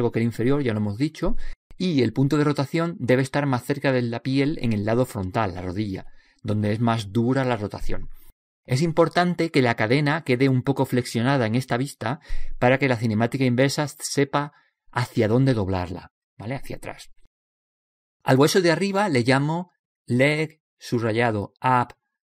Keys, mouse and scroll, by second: 0.6 click, 19.3 right click, 20.0-21.2 middle drag, 21.2 click.